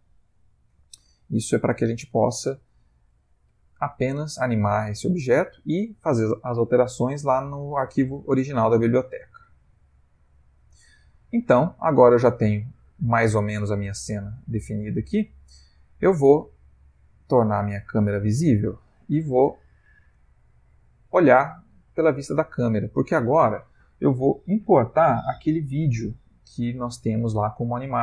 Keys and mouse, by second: 1.1 click, 1.5 g, 2.7 ctrl+Tab, 3.6 g, 9.8 ctrl+s, 10.4 shift+middle click, 11.4 middle click, 14.2 ctrl+middle click, 14.8 ctrl+middle click, 15.3 ctrl+middle click, 17.4 click, 18.1 click, 20.6 click, 22.2 ctrl+middle click.